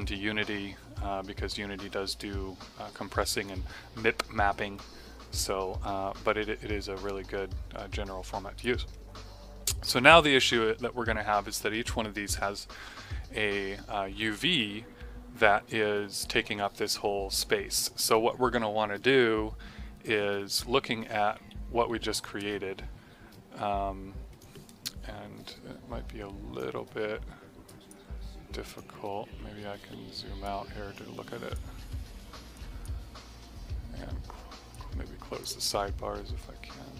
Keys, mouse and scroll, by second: 8.5 click, 20.5 click, 27.6 click, 30.0 z, 30.4 click.